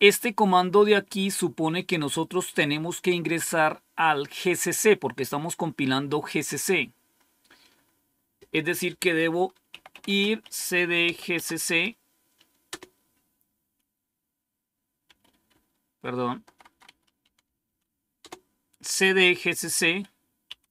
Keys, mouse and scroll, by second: 7.0-8.1 scroll up 1, 8.1-9.0 scroll down 1, 9.4-11.5 typing, 12.6 Return, 15.0 Up, 15.4 Left, 16.1 Left, 16.4 Left, 16.6 Left, 16.8 Left, 17.1 Delete, 17.4 Delete, 17.6 Delete, 18.1 Return, 20.2-20.7 typing.